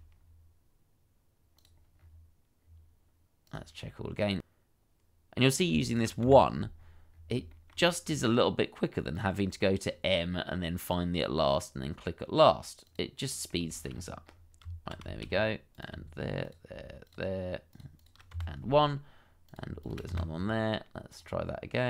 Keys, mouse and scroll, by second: 0.1 shift+middle click, 2.3 scroll down 1, 5.6 shift+middle click, 6.4-6.9 scroll up 2, 6.5 shift+middle click, 7.0 Tab, 8.5 shift+click, 8.7 1, 9.0 scroll down 1, 9.4 shift+middle click, 9.7 scroll down 1, 13.7 shift+middle click, 13.9-14.2 scroll up 1, 14.6 Tab, 15.1 shift+middle click, 15.3-16.0 shift+scroll up 2, 16.4 shift+click, 18.3 1, 19.8 shift+click, 20.1 1.